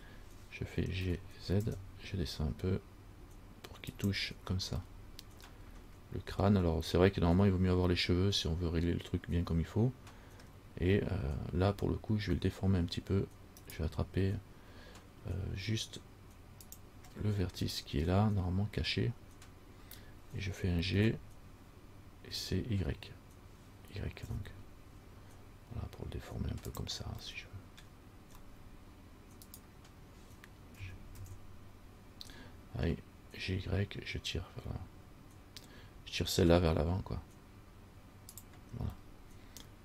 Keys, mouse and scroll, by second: 1.2 g, 5.1 middle click, 5.1 scroll up 1, 10.6-11.4 scroll down 1, 11.4-13.8 scroll up 4, 13.8 right click, 16.8 click, 17.8 right click, 21.1 g, 27.4 scroll up 1, 27.6 middle click, 28.0 scroll down 1, 28.6 scroll up 1, 29.7 right click, 31.0 g, 39.2 middle click.